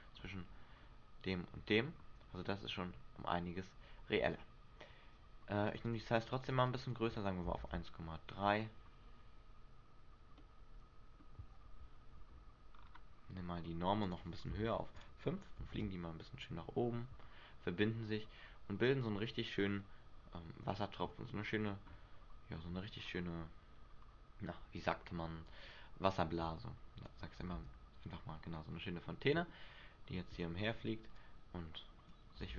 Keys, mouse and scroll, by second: 4.3 Escape, 5.8 click, 6.0 click, 6.3 click, 6.3 click, 6.5 click, 6.8 click, 7.0 click, 7.7 alt+a, 8.0 scroll down 1, 8.6-9.4 scroll down 5, 9.7 scroll down 1, 10.0 scroll up 1, 10.6 middle click, 12.2 Escape, 12.9-13.7 scroll up 4, 14.2 click, 14.2-14.7 scroll up 1, 15.9 alt+a, 19.9 middle click, 22.2 Escape, 24.2-25.6 scroll down 2, 25.6 click, 27.7 alt+a, 29.2 middle click, 30.9 Escape, 31.3 click.